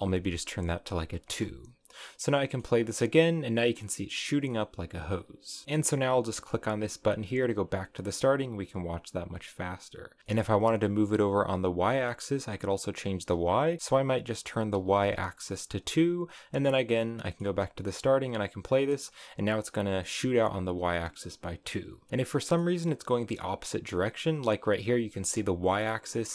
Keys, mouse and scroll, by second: 0.8 click, 1.2 space, 1.7-2.3 scroll down 3, 2.4-4.4 middle drag, 4.4 scroll down 1, 4.6-5.7 middle drag, 7.9-10.2 drag, 10.2-13.2 shift+middle drag, 13.7-15.1 drag, 16.3 click, 17.1 middle click, 17.6 space, 19.8-21.7 middle drag, 21.7 scroll down 1, 21.9-25.2 middle drag, 25.2 space, 25.7-26.3 middle drag.